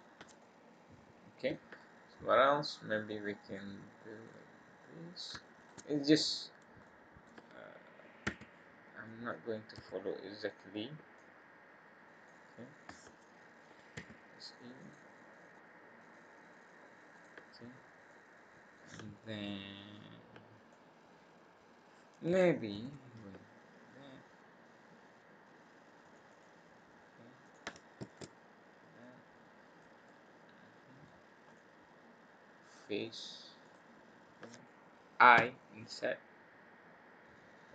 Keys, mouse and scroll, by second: 0.4 middle click, 1.7-2.1 scroll down 2, 2.1 middle click, 4.1 click, 5.1 click, 5.6 shift+click, 6.8 middle click, 8.2 e, 9.7 s, 11.1 click, 13.9 e, 17.1 click, 17.7-18.0 scroll up 1, 18.0 middle click, 19.4 middle click, 20.7 middle click, 22.7 ctrl+r, 27.4 click, 28.0 alt+shift+click, 28.9 click, 30.0 middle click, 31.4 click, 32.7 click, 33.6 click, 35.3 i.